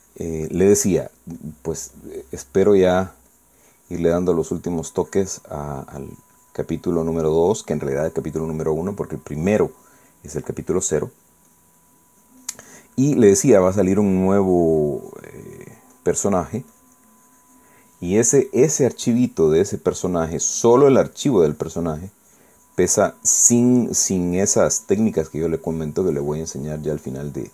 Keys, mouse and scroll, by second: 2.4 click, 2.9 click, 3.7-11.6 drag, 12.0-18.9 drag, 19.5 click, 20.2 click, 21.0-24.3 drag, 24.7-27.5 drag.